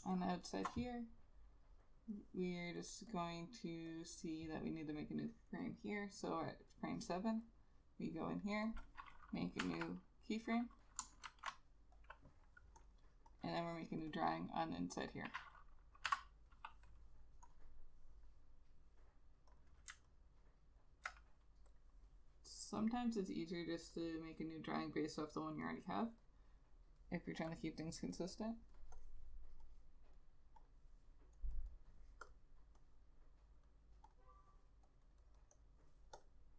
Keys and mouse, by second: 0.1 space, 3.2 double click, 7.5 double click, 9.7 F7, 10.9 double click, 11.4 shift+F6, 13.6 double click, 16.2 F7, 20.2 alt+click, 28.5 double click.